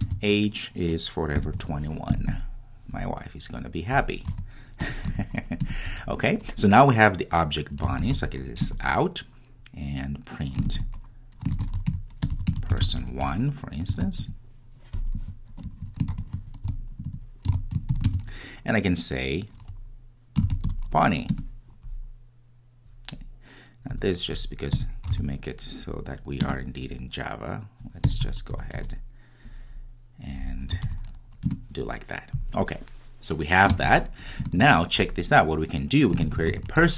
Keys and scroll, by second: 9.0 Return, 21.4 Return, 26.5 Return, 31.5 Return.